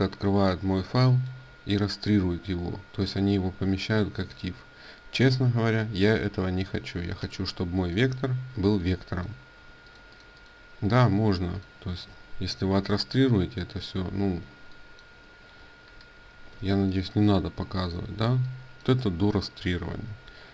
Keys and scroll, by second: 7.0 ctrl+space, 8.3 ctrl+space, 14.1 ctrl+space, 15.8 ctrl+alt+2, 15.8 ctrl+space, 16.3 ctrl+space, 19.8 ctrl+a.